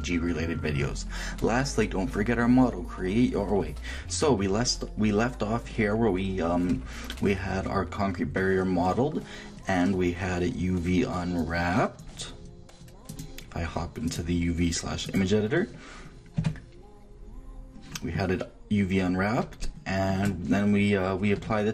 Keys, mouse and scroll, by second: 5.8-7.7 middle drag, 11.4-15.9 drag, 17.1 Tab, 19.1-21.6 middle drag, 21.6 shift+Tab.